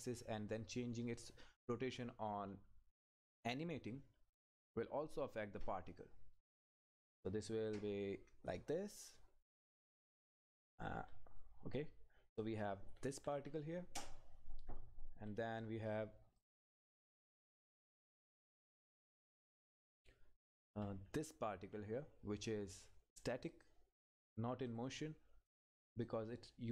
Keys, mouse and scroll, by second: 3.4 Return, 3.9 ctrl+z, 6.0 click, 6.6 Up, 11.1 Right, 13.0 Up, 16.4 click, 16.9-18.0 scroll up 1, 18.0 click, 18.3 Up, 22.8 click.